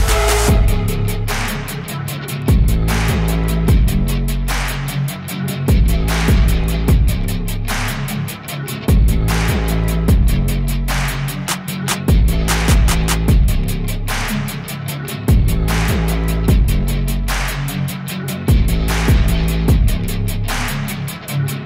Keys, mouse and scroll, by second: 0.0 click, 0.6 s, 0.8 g, 1.4 alt+a, 2.1 alt+a, 2.2 click, 2.6 click, 3.1 click, 3.6 click, 3.9-4.2 shift+right drag, 4.2 click, 4.2-5.7 typing, 4.9 click, 5.8 alt+a, 6.0 click, 6.1 click, 8.0 click, 8.8 click, 9.4 click, 10.7-11.2 scroll, 13.2 click, 13.4 right click, 13.4 scroll, 13.7 g, 13.9 click, 14.2 KP_0, 14.3 s, 15.3 scroll, 16.1 click, 16.3-17.3 typing, 16.5 scroll down 2, 17.7 alt+a, 17.9 click, 18.0 click, 18.1 alt+a, 18.4 click, 19.3 click, 19.9 scroll down 3, 20.1 g, 21.1 click.